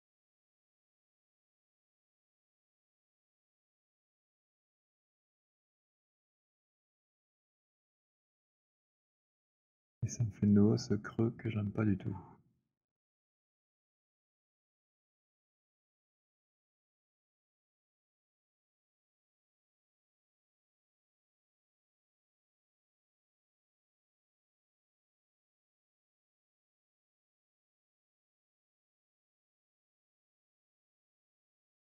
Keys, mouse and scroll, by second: 7.0 click, 9.2 click, 16.8 alt+click, 17.7 alt+middle click, 19.1 alt+middle click, 21.4 alt+click, 22.9 click, 25.0-25.7 c, 26.8-28.7 c, 28.1 click, 29.3 middle click, 29.3 c.